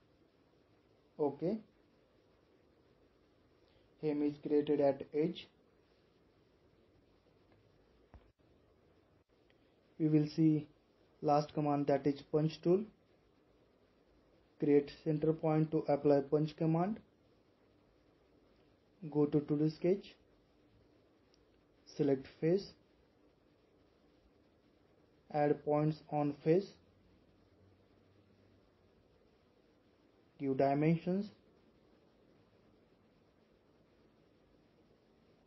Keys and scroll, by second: 34.4 typing.